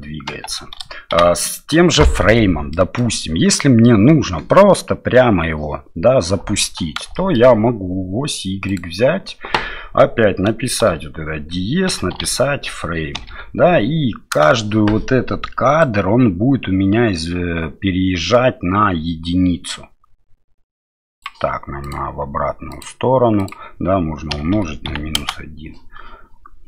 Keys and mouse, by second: 1.1 shift+Left, 2.7 middle click, 3.5 middle click, 7.1 shift+middle click, 8.7-14.4 drag, 15.8-21.2 drag, 21.8-25.7 drag.